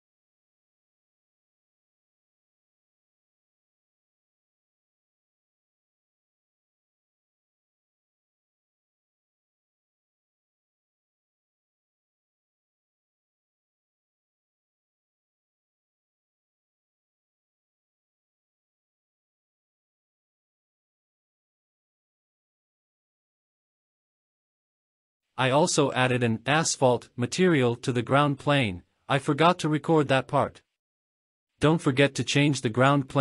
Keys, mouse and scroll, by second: 0.4-0.9 scroll up 4, 0.9 click, 1.1 middle click, 1.2 scroll up 1, 1.4 click, 2.0 shift+middle click, 2.4 click, 3.0 scroll down 3, 3.1 shift+middle drag, 3.2 scroll up 3, 3.5 shift+middle click, 4.2 shift+middle click, 4.2 scroll down 1, 4.4 scroll up 1, 4.6 click, 5.3 click, 5.7-6.2 scroll up 2, 5.8 shift+middle click, 6.4 click, 7.2 scroll down 3, 7.5 middle click, 7.6 scroll up 3, 7.8 middle click, 8.3 click, 8.4 KP_0, 8.5 KP_0, 9.4 scroll down 4, 9.6 middle click, 10.1 KP_0, 10.6 click, 10.9 scroll down 1, 10.9 middle click, 11.1 middle click, 11.1 scroll up 1, 11.3 click, 11.8 ctrl+s, 12.1 click, 13.2 F12, 17.0 click, 17.2-17.5 scroll down 4, 17.8 F12, 26.4 click, 31.4 click, 32.4 ctrl+s, 32.5 drag, 32.9 click.